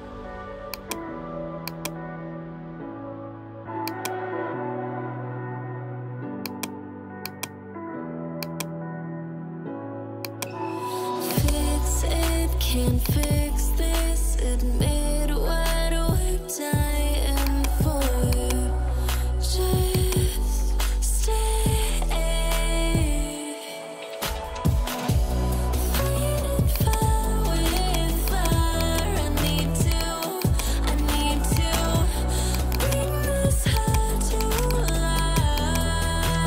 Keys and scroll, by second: 31.0 ], 31.9 [, 33.1 ], 34.4 [, 34.9 ].